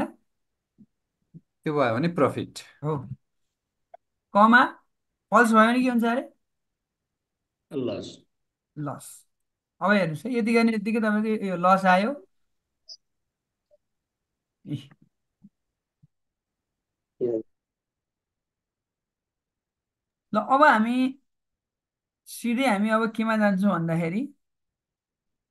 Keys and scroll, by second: 2.9 shift+', 5.7 shift+', 7.1-9.0 typing.